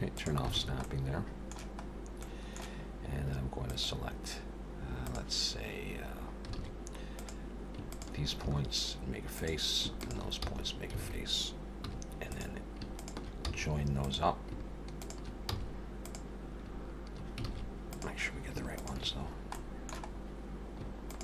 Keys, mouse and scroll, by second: 0.0 click, 0.6 alt+a, 0.8 middle click, 1.8 scroll up 1, 2.1 middle click, 3.6 click, 5.0 click, 6.6 alt+a, 7.1 click, 7.9 shift+click, 8.4 f, 9.4 click, 10.0 shift+click, 10.4 f, 11.0 alt+a, 11.9 2, 12.3 click, 12.9 shift+click, 13.4 f, 14.0 click, 15.0 shift+click, 15.5 f, 16.0 click, 17.5 alt+a, 17.9 click, 18.8 shift+click, 19.6 middle click, 20.1-20.5 scroll up 1, 21.1 shift+click.